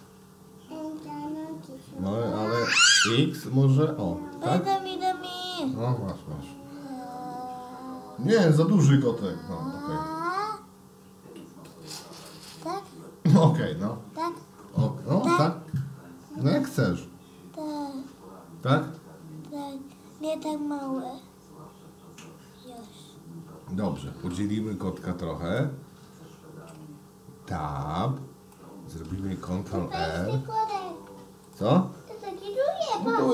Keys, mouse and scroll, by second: 0.6 s, 25.6-26.7 middle drag, 27.6 Tab, 28.6 middle click, 30.6 ctrl+r.